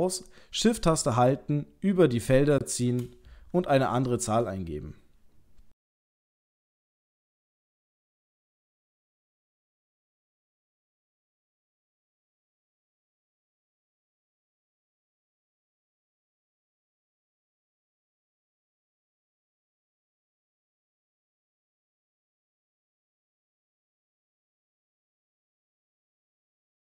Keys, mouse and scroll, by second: 1.3 shift+click.